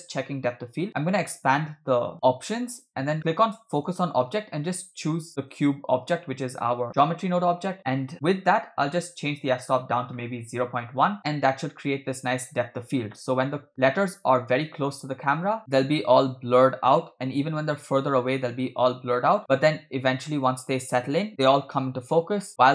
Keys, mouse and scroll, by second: 0.1 click, 1.0 click, 3.7 click, 9.2 click, 11.2 space, 12.3 space, 13.0 space, 13.7 Left, 13.9 Left, 14.4 Left, 15.1 Left, 15.1 Left, 15.6 click, 15.6 space, 17.3 Right, 17.7 Right, 18.4 Right, 19.2 space, 21.3 space, 22.1 space.